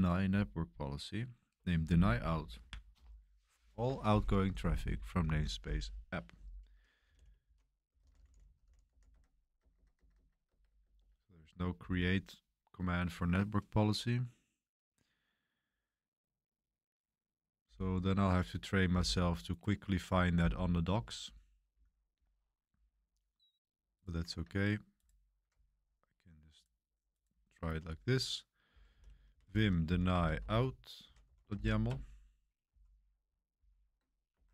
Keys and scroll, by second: 6.8-11.6 typing, 9.7 Tab, 10.0 Tab, 10.5 Tab, 11.8 ctrl+c, 28.4-34.5 typing, 34.3 Escape.